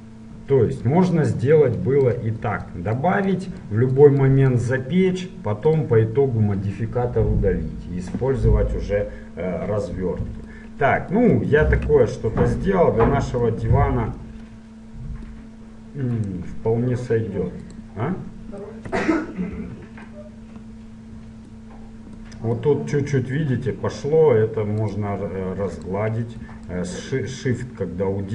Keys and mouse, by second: 7.6-8.8 middle drag, 10.8-14.8 middle drag, 16.3-18.1 right drag, 17.8-19.6 drag, 18.7 middle click, 19.7 ctrl+1, 26.2 click, 26.9-28.3 drag.